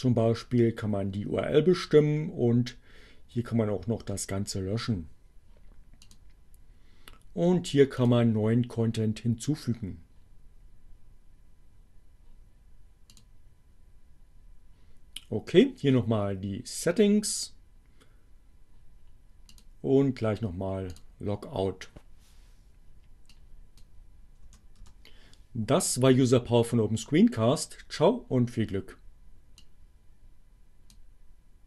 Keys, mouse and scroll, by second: 5.5 click, 8.0 click, 13.1 click, 19.6 click, 20.8 click, 23.2 click, 24.5 BackSpace, 24.9 Return, 29.5 click.